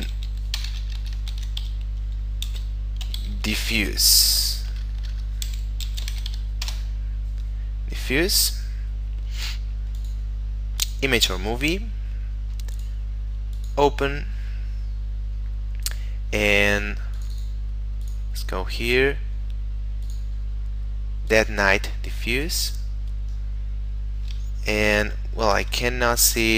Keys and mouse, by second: 0.1 f, 0.6 BackSpace, 1.4 shift+d, 2.5 f, 3.1 u, 3.6 e, 4.7 BackSpace, 5.9 f, 6.0 u, 6.2 s, 6.7 Return, 10.0 click, 11.6 middle click, 12.8 click, 16.8 click, 22.6 click, 24.6 shift+middle click.